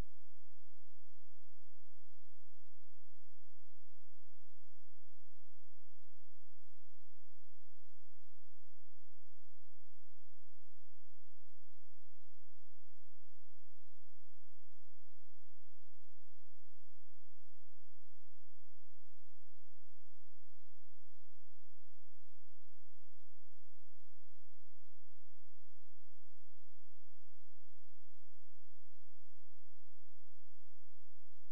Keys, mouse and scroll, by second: 2.0 right click, 2.1 right click, 2.7 click, 3.1-4.0 scroll down 1, 4.0-4.6 scroll up 1, 4.6 click, 5.5 shift+Page_Down, 6.7 ctrl+z, 7.0 click, 8.3 shift+Page_Down, 9.3-9.9 scroll down 1, 9.9 click, 10.5-12.3 scroll up 1, 13.7-14.5 scroll up 1, 14.5 click, 16.5 F12, 17.6 click, 31.1 scroll down 1.